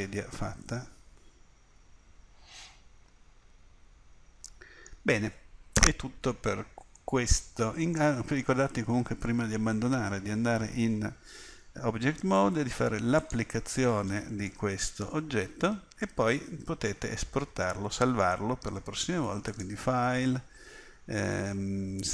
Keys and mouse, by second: 1.1 middle click, 1.9 middle click, 7.0 middle click, 10.2-13.2 middle drag, 13.2-14.5 drag, 14.5 middle click, 14.9 click, 16.5 middle click, 19.5 click.